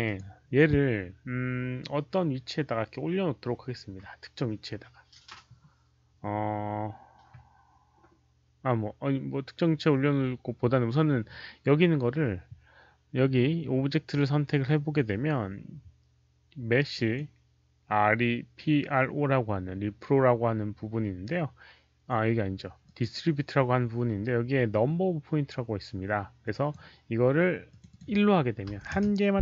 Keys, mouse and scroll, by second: 0.1 alt+middle click, 0.1 alt+right click, 2.3 alt+click, 2.3 alt+middle click, 2.3 alt+right click, 4.2 alt+click, 4.2 alt+middle click, 4.2 alt+right click, 5.7 alt+click, 5.7 alt+middle click, 16.8 click, 22.7 click, 26.4 click, 27.6 click, 27.8 click, 28.9 Return.